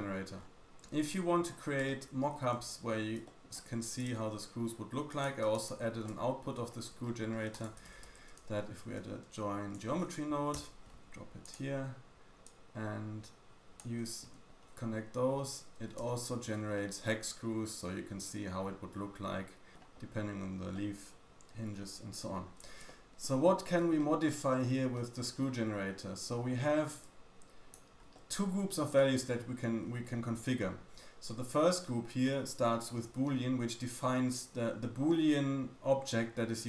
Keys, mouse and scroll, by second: 0.3-1.1 scroll down 2, 1.1-1.8 scroll down 5, 1.8 shift+middle click, 2.4-2.9 scroll up 2, 2.9-3.2 scroll down 2, 3.3 shift+middle click, 3.9 click, 3.9 middle click, 3.9 right click, 4.1 g, 5.5-6.6 shift+drag, 5.5-6.6 shift+middle drag, 5.5-6.6 shift+right drag, 6.7 scroll up 1, 7.0-7.4 shift+scroll down 1, 7.4 shift+middle click, 7.5 click, 7.8 shift+a, 12.9 click, 15.3-15.6 scroll up 3, 16.0-16.5 shift+middle drag, 16.5-17.0 scroll up 2, 21.3-21.7 scroll up 1, 21.7 scroll down 1, 21.9-22.4 scroll down 1, 22.4-22.8 scroll down 1, 22.8 shift+middle click, 23.3-23.8 scroll up 3, 23.8 shift+middle click, 24.3-24.8 scroll up 3, 24.8 shift+middle click, 24.9-25.2 shift+scroll down 1, 25.3-25.7 scroll up 4, 27.0 click, 27.0-27.5 scroll up 1, 27.9 scroll down 2, 28.1 shift+middle click.